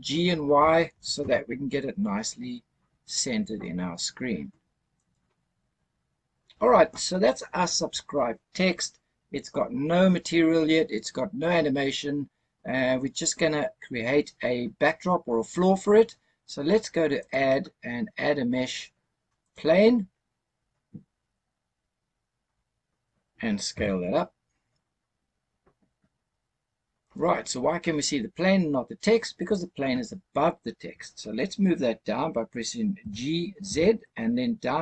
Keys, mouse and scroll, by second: 0.8 g, 1.1 y, 4.9 click, 17.1-19.6 drag, 21.0-22.4 scroll up 4, 22.4-23.6 scroll down 2, 23.6 s, 27.0 click, 28.6-30.1 scroll up 1, 32.9 g, 33.5 z.